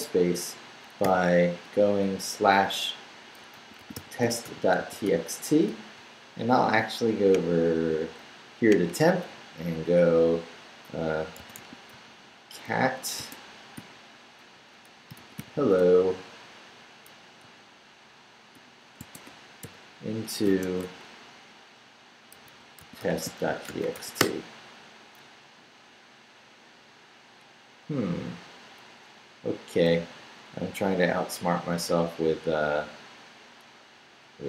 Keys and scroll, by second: 1.0 /, 3.2-5.5 typing, 11.1-13.2 typing, 14.8-15.9 typing, 17.4 o, 19.0 -, 19.6 shift+., 20.4 shift+-, 22.1-24.4 typing.